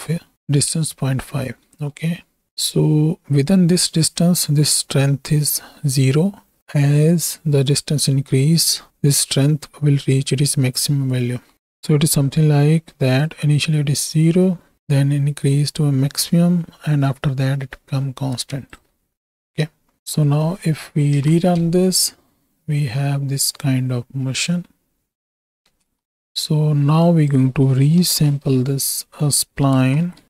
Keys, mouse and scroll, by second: 0.3 middle click, 1.8 middle click, 11.5 middle click, 11.5 ctrl+z, 11.5 d, 12.2-18.7 d, 13.1 click, 20.0 ctrl+z, 20.2 click, 21.0 shift+Right, 21.2 shift+Left, 21.9 space, 25.7 space, 26.2 shift+Right, 26.2 shift+Left, 27.2-30.2 drag.